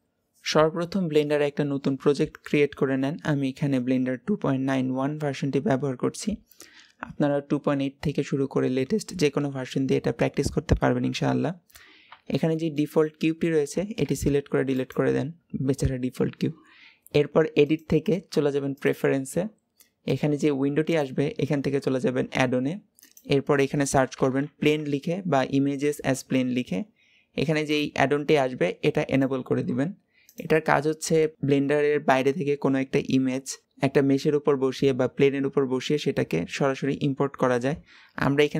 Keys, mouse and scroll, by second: 0.0 n, 12.1-13.9 shift+middle drag, 13.9 x, 17.5-20.6 drag.